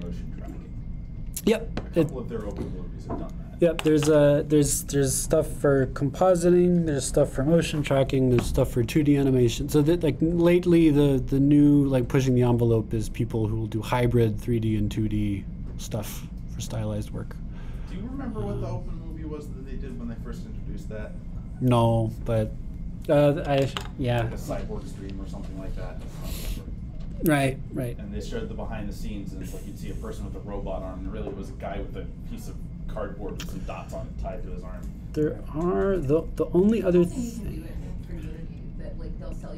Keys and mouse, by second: 0.9-2.8 drag, 2.8-30.7 middle drag, 30.7-34.4 drag.